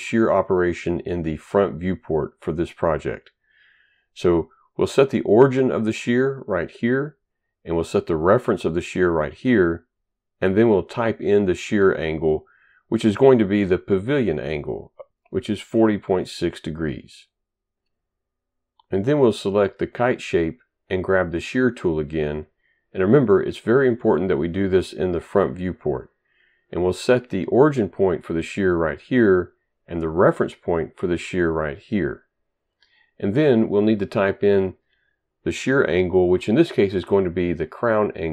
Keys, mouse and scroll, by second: 6.6 click, 9.8 click, 15.3-17.0 typing, 20.2 click, 22.2 click, 29.0 click.